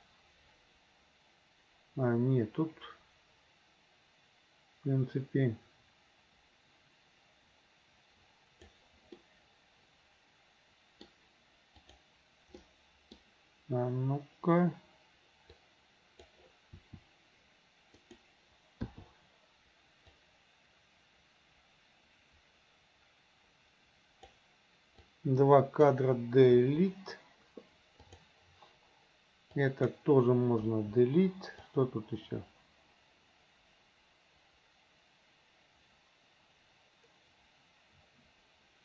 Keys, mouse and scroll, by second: 0.1-8.7 drag, 9.2 middle click, 10.5 middle click, 12.7 middle click, 15.7 click, 16.8 r, 18.9 i, 20.2-24.4 drag, 25.1-25.9 drag, 26.6 Delete, 28.1 click, 29.5-29.9 drag, 30.7 Delete, 31.8-38.8 drag.